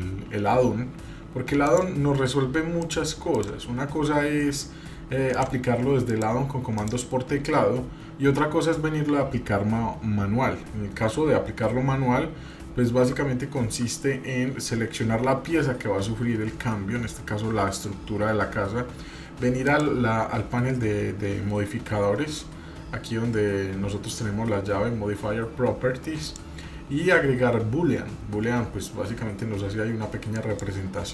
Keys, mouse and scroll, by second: 2.8 click, 3.3 click, 5.3 click, 6.1 click, 6.8 click, 8.8-10.5 middle drag, 19.7 click, 26.2-30.6 drag.